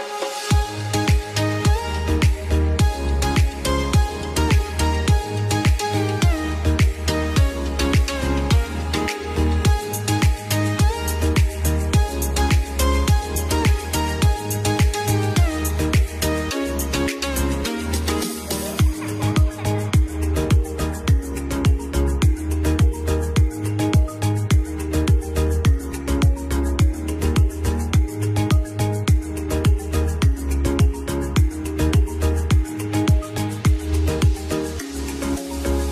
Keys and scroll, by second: 0.9 space, 8.4 ctrl+r, 14.8 F3, 27.1 e, 27.8 F3.